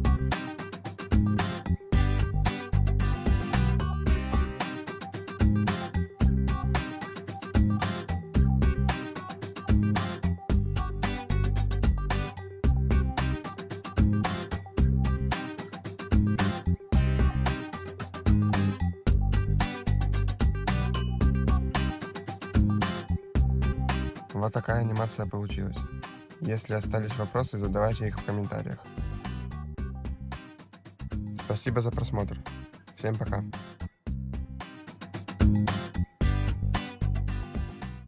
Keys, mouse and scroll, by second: 1.2 middle click, 4.3 click, 6.5 click, 6.9 click, 7.2 click, 8.0 click, 8.6 middle click, 9.9 scroll up 3, 13.3 click, 14.4 click, 14.8 click.